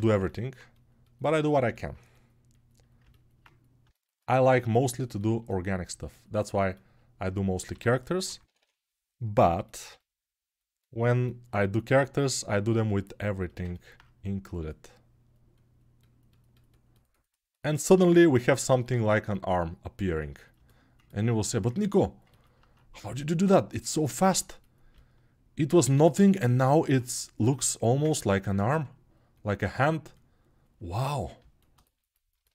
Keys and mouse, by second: 13.1-32.5 ctrl+alt+drag.